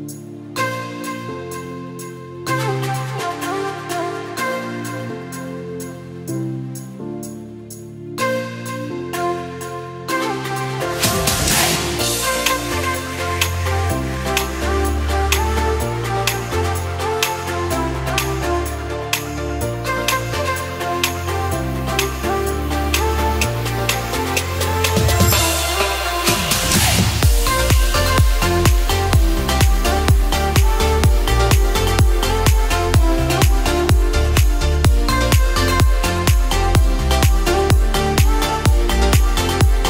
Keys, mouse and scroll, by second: 1.6 s, 4.0 click, 5.9 e, 8.0 ctrl+z, 8.6 e, 12.3 e, 20.5 s, 25.2 e, 28.8 s, 32.6 e, 36.1 s.